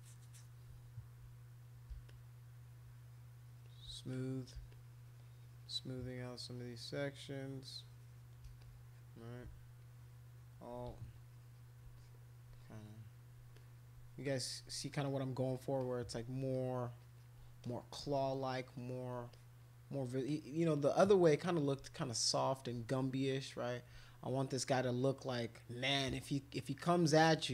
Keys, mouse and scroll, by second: 2.1-3.8 shift+drag, 4.1 click, 4.7-8.2 shift+drag, 8.6 click, 9.8 alt+click, 11.2 alt+click, 11.3 alt+click, 12.0 click, 12.6 alt+click, 13.1 alt+click, 13.5 click, 14.3 alt+click, 15.1 click, 15.8 click, 16.5 alt+click, 17.0 alt+click, 17.2 alt+click, 17.6 click, 18.4 alt+click, 18.8 alt+click, 19.3 click, 20.3 click, 22.0 alt+click, 22.4 alt+click, 22.9 click, 24.3 alt+click, 25.0 alt+click, 25.3 alt+click, 26.7 click.